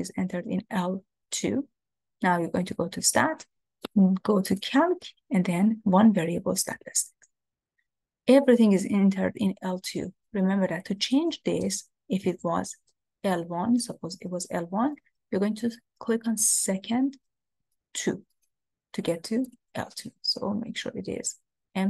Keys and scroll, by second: 3.8 Right, 6.8 Return, 13.8 1, 18.0 2.